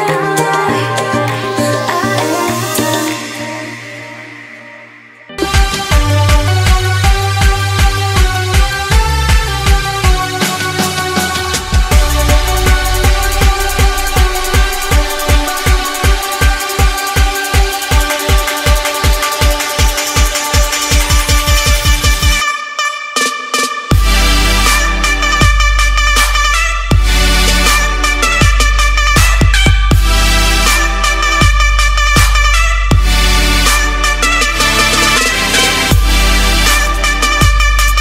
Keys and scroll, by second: 0.8 ctrl+z, 2.1 ctrl+z, 4.3 ctrl+0, 4.7 ctrl+s.